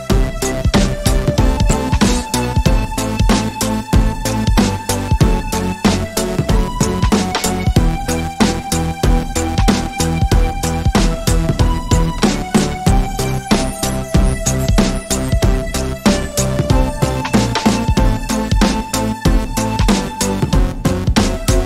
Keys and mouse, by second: 3.3 KP_1, 6.1 alt+d, 9.6 x, 13.3 shift+d, 16.2 shift+d, 20.5 shift+d.